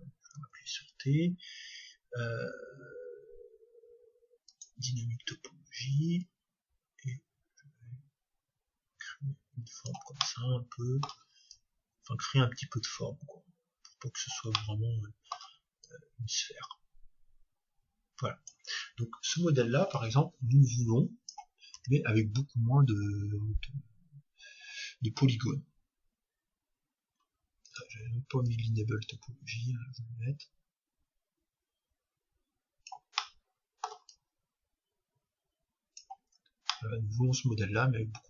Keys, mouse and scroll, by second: 1.5-2.8 scroll down 1, 4.5-8.1 drag, 10.2-12.1 middle drag, 11.5-13.4 drag, 14.6-16.5 middle drag, 15.9-17.8 drag, 20.0-21.9 drag, 21.8 Tab, 25.3 Tab, 27.6-30.4 drag, 33.2-35.1 middle drag, 34.1-36.1 drag, 36.2 Tab, 36.7-38.2 middle drag.